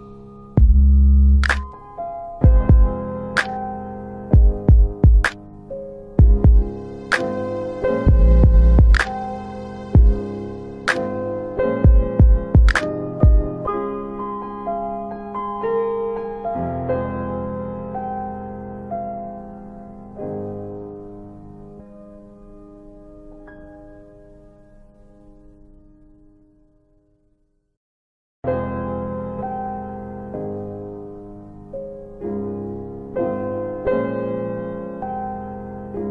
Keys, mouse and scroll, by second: 1.4 right click, 3.9 click, 5.2 right click, 10.4 alt+click, 10.6 alt+click, 11.0 alt+middle click, 16.2 click, 16.5 click, 17.3-18.0 typing, 19.1 Return, 19.1 typing, 20.9 click, 24.6 ctrl+z, 26.6 alt+click, 26.7 alt+click, 27.0 alt+right click, 27.1 alt+right click, 27.4 alt+click, 27.6 alt+click, 28.0 alt+middle click, 28.5 alt+click, 28.7 alt+click, 29.0 alt+right click, 30.0 alt+click, 34.5 click, 35.6 click.